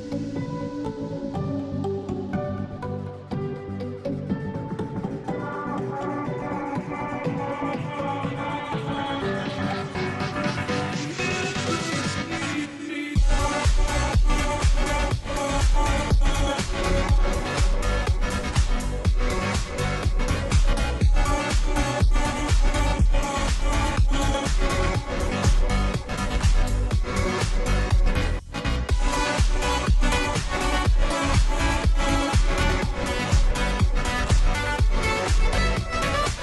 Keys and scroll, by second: 0.0-36.4 typing, 17.1 Return, 20.0 ctrl+g, 33.1 Return.